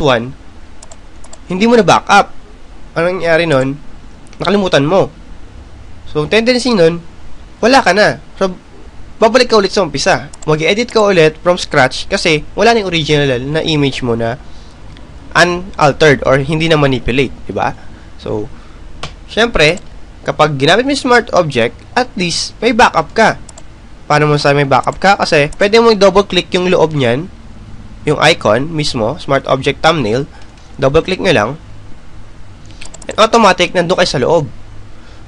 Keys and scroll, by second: 21.0 Delete.